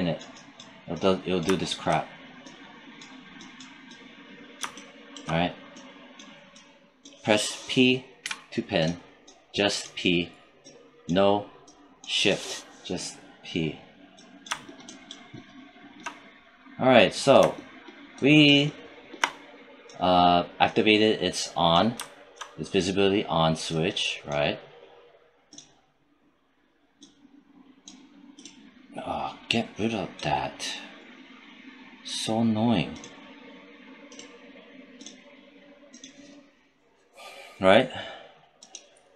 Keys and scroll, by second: 8.1 p.